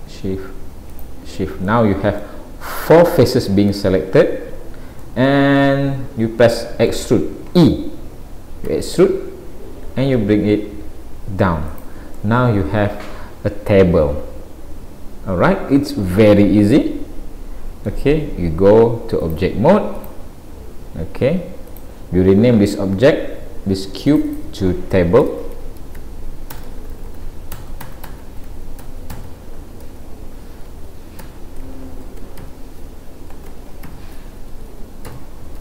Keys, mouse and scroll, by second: 0.9 shift+click, 1.7 middle click, 8.7 e, 12.2 middle click, 19.2 click, 21.7 click, 24.1 click, 24.3 click.